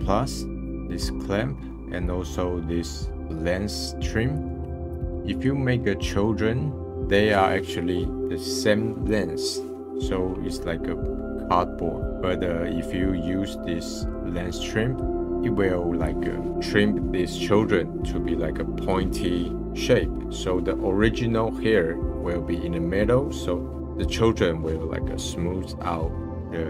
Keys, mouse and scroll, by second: 0.5-0.8 scroll up 1, 0.8 scroll down 2, 1.6-2.1 middle drag, 2.1-3.9 scroll up 1, 4.3 click, 4.6 `, 14.9-16.5 drag.